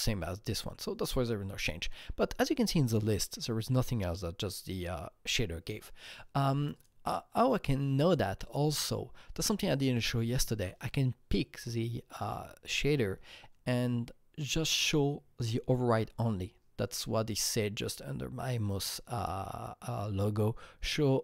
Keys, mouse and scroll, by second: 6.7 click, 7.4 click, 10.0 click, 10.0-12.3 scroll up 1.